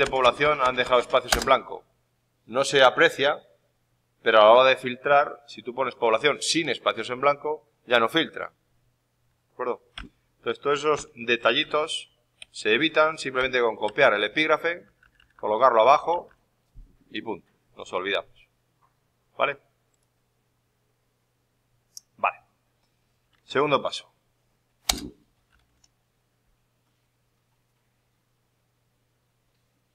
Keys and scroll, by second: 1.3 Return, 11.6 F2, 12.3 Escape, 14.0 ctrl+Down, 15.8 Up, 23.2 alt+Tab.